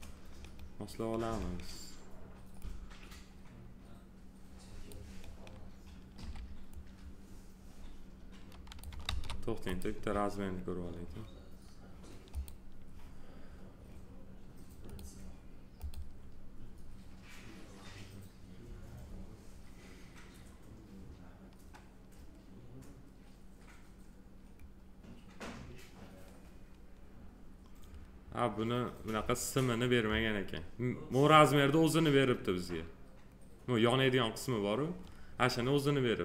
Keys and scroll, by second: 6.2 r, 9.0 ctrl+z.